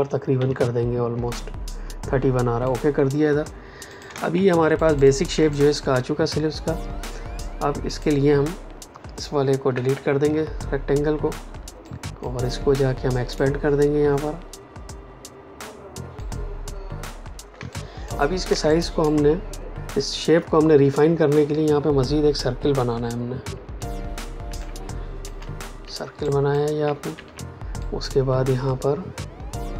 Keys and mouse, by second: 0.3 Up, 2.6 click, 4.0 space, 4.7 ctrl+alt+click, 5.4 click, 9.6 Delete, 11.8 click, 16.1 click, 17.5 space, 17.6 click, 18.0 space, 18.6 click, 18.9 space, 23.5 l, 24.5 alt+shift+click, 26.2 click, 27.7 click.